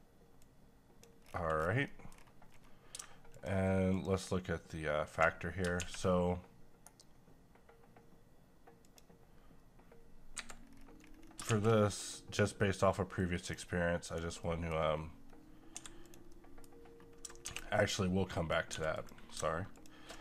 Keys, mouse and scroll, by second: 1.3 scroll down 1, 1.8 middle click, 2.1-2.5 scroll down 1, 3.3 shift+click, 5.7 a, 8.8 click, 10.3 Escape, 10.6-11.2 scroll down 1, 11.2 scroll up 1, 11.5 shift+a, 13.1 click, 14.3 scroll down 1, 14.4 middle click, 14.7-15.7 scroll up 1, 15.7 g, 16.0 click, 16.3 middle click, 17.4 x, 18.4 click, 18.7 g, 18.9 click, 19.8 ctrl+click.